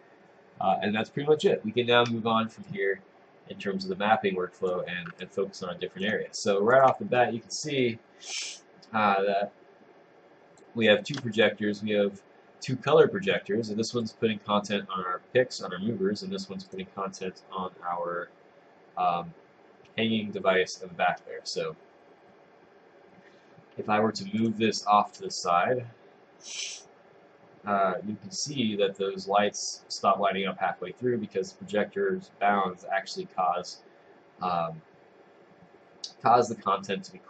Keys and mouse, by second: 2.7 click, 11.5 click.